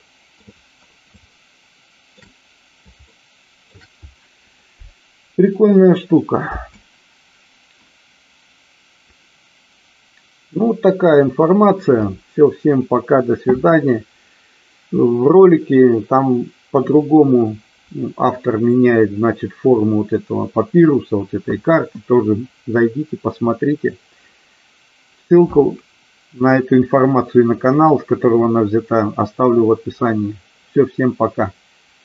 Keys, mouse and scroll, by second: 1.5-2.5 shift+middle drag, 3.3-4.0 shift+middle drag, 6.9 space.